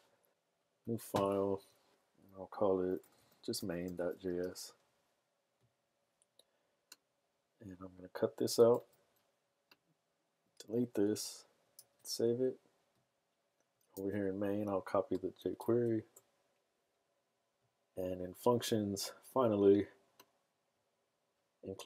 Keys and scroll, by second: 2.7-4.4 typing, 8.7 super+x, 10.3 super+x, 10.8 BackSpace, 11.1 BackSpace, 11.9 super+s, 14.0 super+v.